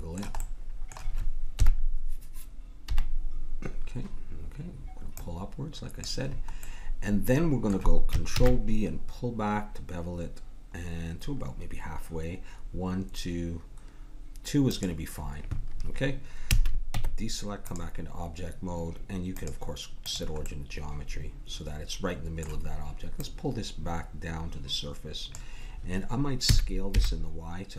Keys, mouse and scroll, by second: 1.5 KP_1, 2.9 KP_3, 5.2-8.3 drag, 8.3 ctrl+b, 16.4 a, 16.9 Tab, 19.3-21.2 drag, 21.2-22.3 middle drag, 23.2-25.0 drag, 26.4 s.